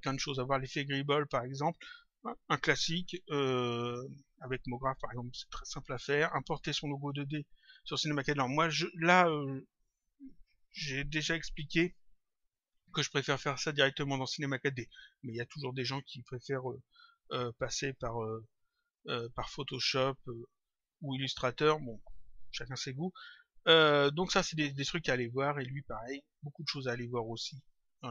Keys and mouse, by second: 18.9 click, 23.0 click, 25.3 click, 26.7 click.